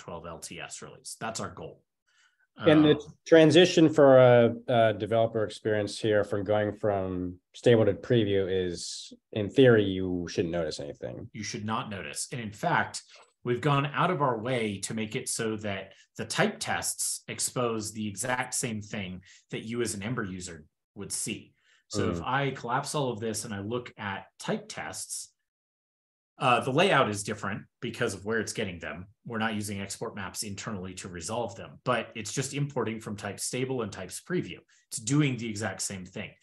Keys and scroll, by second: 5.1 ctrl+p, 5.3 ctrl+p.